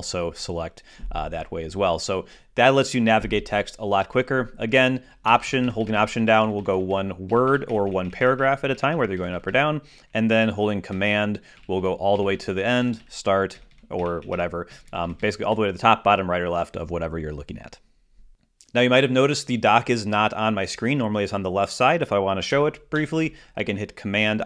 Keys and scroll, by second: 0.6 shift+super+Down, 6.1 alt+Left, 8.5 alt+Up, 12.4 super+Right, 14.4 super+Down, 23.8 alt+super+d.